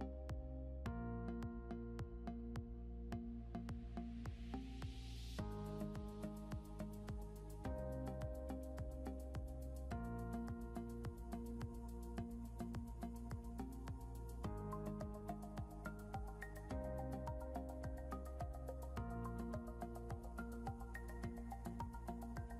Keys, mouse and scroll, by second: 0.4 right click, 4.3 double click, 5.4 scroll up 1, 8.0 ctrl+z, 10.0 ctrl+g, 12.0 scroll up 1, 15.1 ctrl+7, 16.4 ctrl+Home, 19.0 double click, 21.8 scroll up 1.